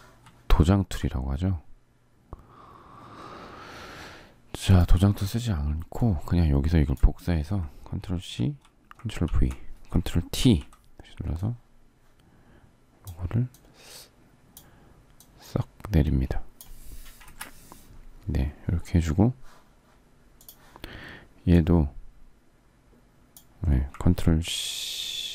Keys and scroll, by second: 8.0 ctrl+c, 9.0 ctrl+v, 10.1 ctrl+t, 17.0 Return.